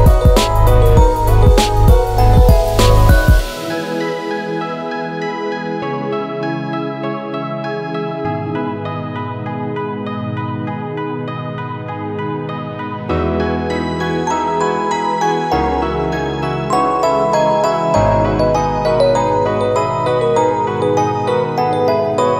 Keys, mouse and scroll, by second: 0.1 right click, 0.7 middle click, 1.4 middle click, 1.7 Tab, 2.4 alt+shift+click, 3.1 u, 3.2 u, 3.2 i, 5.3 r, 6.7 g, 9.2 Tab, 9.6 middle click, 10.8-11.1 scroll down 3, 11.0 click, 11.4 shift+middle click, 11.7 middle click, 12.2 KP_Decimal, 12.6 middle click, 13.0 Tab, 13.3 shift+middle click, 13.8 right click, 17.1 click, 17.9 middle click, 18.7 right click, 21.1 Tab, 21.6 click, 22.0 middle click.